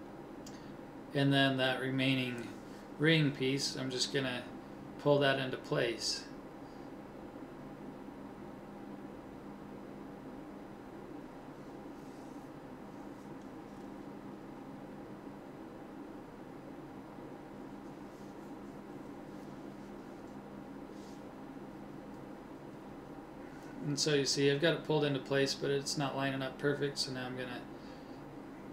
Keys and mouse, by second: 2.1-5.1 middle drag, 5.1 c, 8.4-10.1 drag, 10.1 s, 22.3-24.3 middle drag, 24.3 a, 26.7 c, 28.2 g.